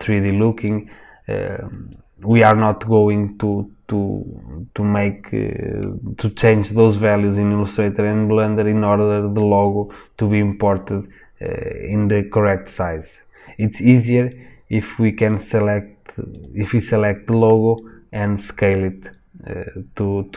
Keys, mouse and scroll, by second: 18.0-19.0 scroll down 1, 19.0-20.3 scroll up 1.